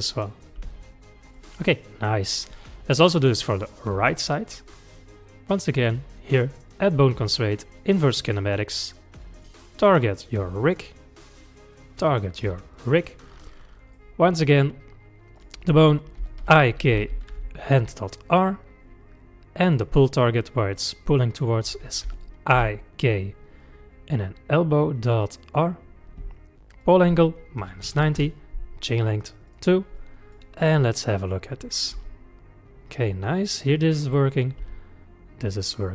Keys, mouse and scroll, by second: 0.0-0.6 middle drag, 0.6 g, 1.6-3.0 middle drag, 3.0 click, 3.4-5.6 middle drag, 5.6 click, 6.5-9.4 drag, 11.7 click, 13.6-15.4 middle drag, 15.4-18.4 drag, 19.6-22.8 drag, 26.8-30.0 drag, 30.0-31.8 middle drag, 31.8 click, 32.0 g, 33.3-34.3 middle drag, 34.3 click, 34.6 g.